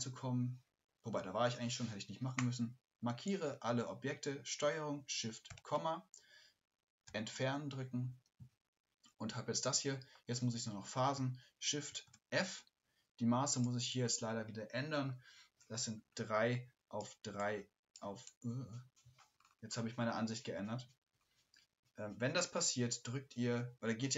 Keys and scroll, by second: 5.5 ctrl+shift+,, 11.1 ctrl+shift+,, 11.9 shift+f.